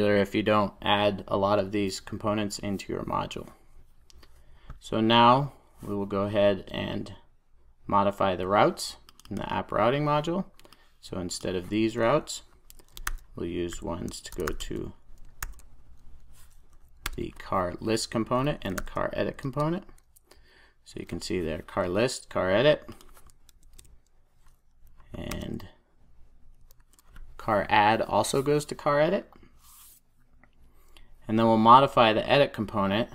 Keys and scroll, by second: 15.5 super+j, 17.0 Return, 23.6 alt+Return, 26.7 alt+Return, 26.7 super+s.